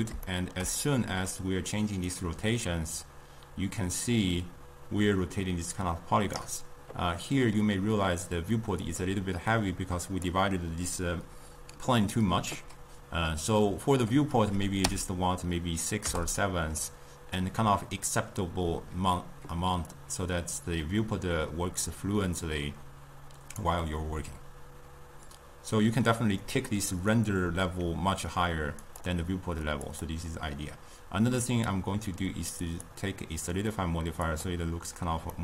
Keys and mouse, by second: 2.2-5.9 drag, 8.9-13.3 drag, 20.0-23.2 drag, 29.0-31.7 drag, 33.0-35.4 drag.